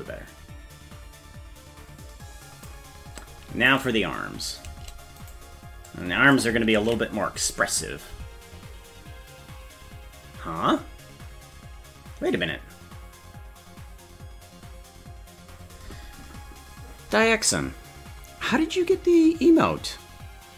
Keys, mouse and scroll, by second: 3.8 right click, 5.3 right click, 5.9 click, 7.0 ctrl+s.